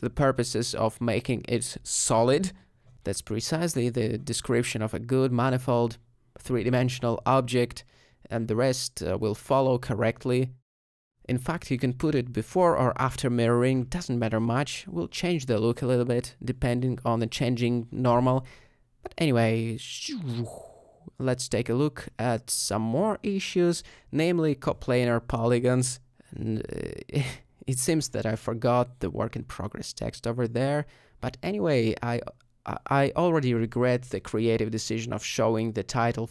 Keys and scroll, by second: 19.3 s, 21.5 s, 29.3 alt+g, 30.9 s, 31.6 g, 33.1 shift+z, 34.0 s, 35.6 shift+z.